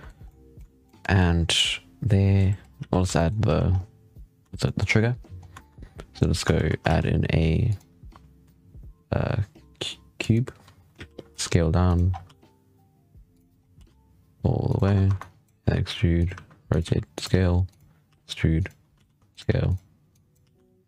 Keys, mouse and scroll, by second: 0.1-0.9 middle drag, 0.9 scroll up 1, 1.0-2.3 middle drag, 2.6 z, 3.0-3.3 shift+middle drag, 3.3 z, 3.5 scroll up 6, 4.3 scroll down 5, 4.5-5.9 shift+middle drag, 5.9 scroll down 6, 6.4 shift+s, 6.7 shift+a, 10.6 scroll up 1, 10.8 z, 11.2 s, 12.0 scroll up 3, 12.1 g, 13.5 scroll up 4, 13.6 s, 14.7 Tab, 14.9-20.3 typing, 15.0 click, 20.0 click.